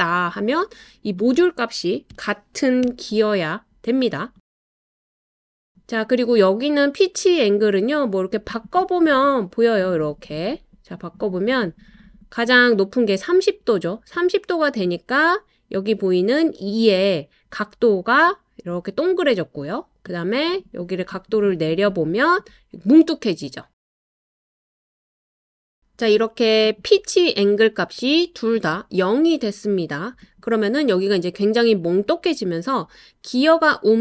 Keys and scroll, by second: 2.1-2.8 typing.